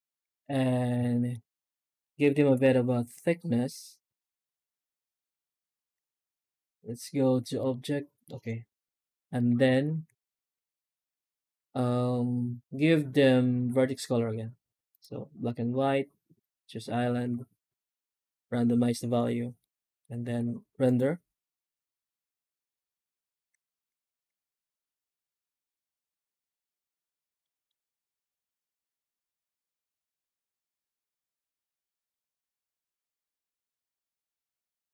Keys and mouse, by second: 0.0 middle click, 0.2 middle click, 1.0 shift+middle click, 1.9 middle click, 2.3 F9, 7.7 click, 8.1 middle click, 9.2 right click, 9.5 alt+shift+z, 10.5 alt+shift+z, 11.0 alt+shift+z, 11.4 shift+q, 15.2-17.7 drag, 19.4-19.9 middle drag, 20.1 z, 23.5 alt+shift+z, 24.1 alt+shift+z, 24.5 shift+middle drag, 27.3 shift+middle click, 27.8 middle click, 28.3 shift+middle click, 32.0 shift+middle click, 32.8 middle drag, 33.0 click, 33.3 z, 34.6 middle drag.